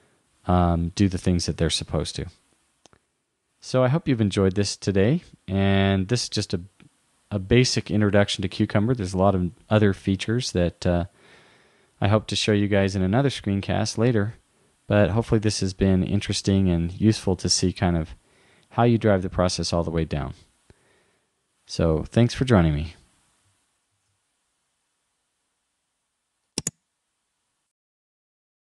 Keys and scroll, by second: 24.0 shift+super+a.